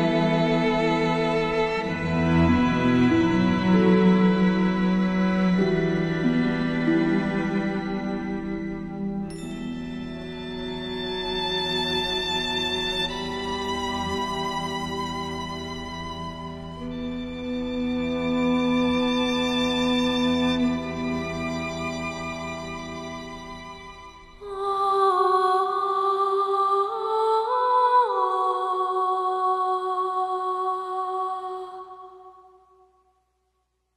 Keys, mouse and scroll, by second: 4.0 click, 4.4 alt+scroll down 1.